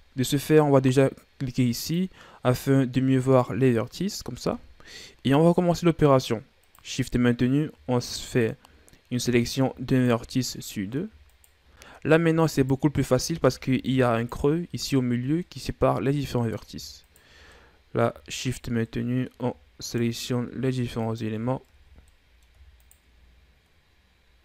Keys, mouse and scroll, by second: 1.8 click, 2.5-3.1 scroll up 1, 3.1-4.8 middle drag, 4.8-6.6 scroll up 2, 6.6 right click, 8.3 shift+right click, 8.9-9.9 middle drag, 9.9 shift+right click, 10.3 middle click, 11.3 shift+right click, 11.8 middle click, 12.5 shift+right click, 13.4 ctrl+z, 14.1 shift+right click, 15.4-17.0 middle drag, 17.0 shift+right click, 17.5 middle click, 18.4 shift+right click, 18.9 middle click, 19.8 shift+right click, 21.0 shift+right click, 21.8 ctrl+z, 22.1 middle click, 22.8 shift+right click.